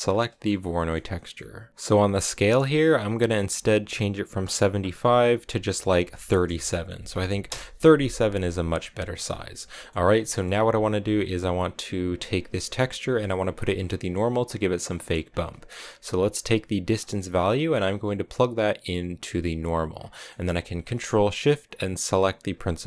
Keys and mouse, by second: 0.0 ctrl+shift+click, 0.7 middle click, 1.1 middle click, 4.4-7.9 drag, 9.6 middle click, 10.1 middle click, 14.9 middle click, 16.8-19.5 drag, 20.0 middle click, 22.2 ctrl+shift+click.